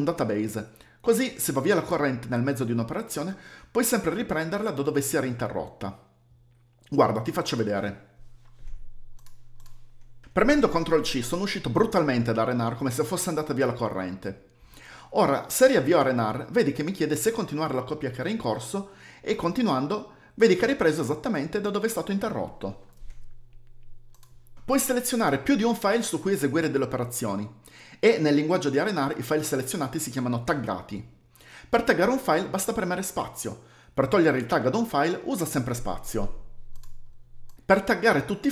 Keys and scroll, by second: 8.7 ctrl+c, 17.0-17.7 typing, 24.6 ', 26.6 typing, 28.1-28.8 typing, 30.2 Down, 30.3 Down, 30.4 Down, 30.5 Down, 30.5 Down, 34.8 typing, 35.4 Up, 35.5 Up, 35.6 Up, 35.7 Up, 35.8 Up, 35.8 Up.